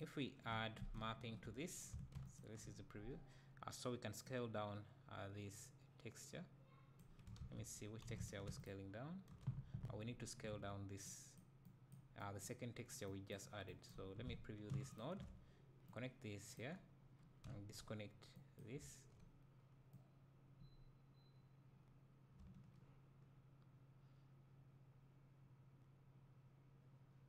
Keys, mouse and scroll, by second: 1.0 ctrl+t, 2.3 ctrl+shift+click, 5.2-8.6 drag, 7.4 ctrl+z, 11.6-12.2 drag, 13.1 click, 14.9 ctrl+shift+click, 15.9-27.2 drag, 18.9 `.